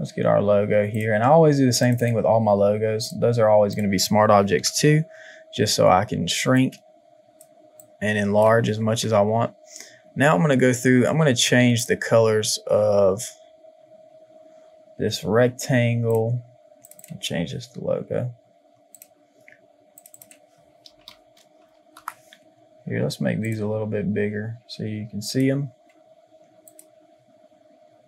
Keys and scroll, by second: 4.6 ctrl+t, 8.8 Return, 20.8 shift+l.